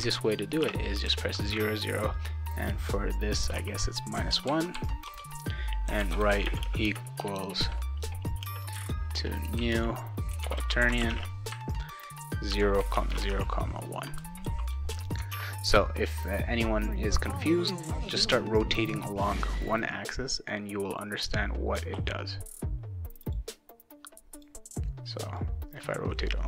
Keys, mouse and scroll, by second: 0.6 0, 3.3 -, 4.3 ctrl+s, 5.1 Return, 5.6-14.4 typing, 14.9 ctrl+s, 15.3 alt+Tab, 18.9-21.0 drag, 21.9 ctrl+z, 23.3 click, 24.3 click, 25.3-26.4 drag.